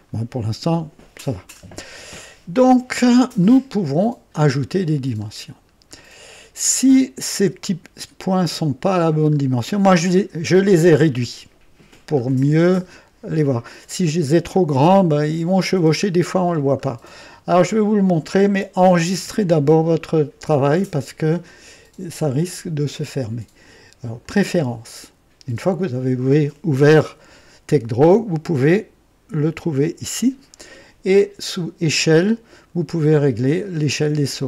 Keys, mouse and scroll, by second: 1.2 scroll up 2, 2.2-2.9 scroll up 2, 3.4 right click, 4.8-5.8 scroll up 5, 6.7-7.0 scroll up 1, 7.2-7.9 right drag, 8.5 scroll up 2, 9.1-9.4 scroll up 2, 12.0-12.9 scroll up 4, 13.9-14.3 scroll up 1, 16.0-16.3 scroll down 1, 17.3-18.3 right drag, 19.1 ctrl+s, 22.5 click, 24.1 click, 29.7 click, 31.5 click.